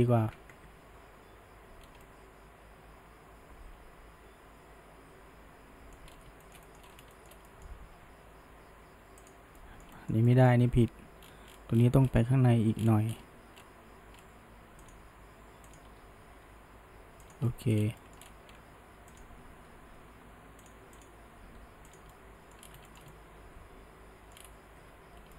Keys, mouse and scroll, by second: 0.0 ctrl+z, 0.5 Tab, 1.8 scroll up 1, 2.0-5.1 middle drag, 6.1-6.4 scroll up 1, 6.4-6.8 shift+middle drag, 6.8 scroll up 1, 7.1-8.0 shift+middle drag, 8.0 Tab, 9.3 click, 9.6-10.7 middle drag, 10.7 g, 15.7 click, 16.0 g, 17.5 middle click, 17.8 scroll, 18.0 middle click, 18.2-19.2 scroll up 1, 19.2 click, 19.7 g, 21.0 click, 21.6 g, 22.1 middle click, 22.6 scroll, 22.9-24.4 shift+middle drag, 24.8 Tab.